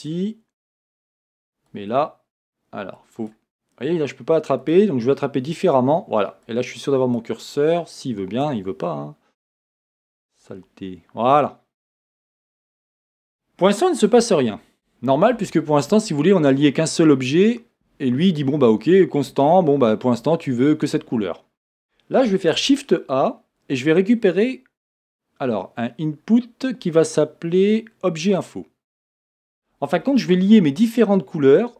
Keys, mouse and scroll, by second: 28.7 middle click.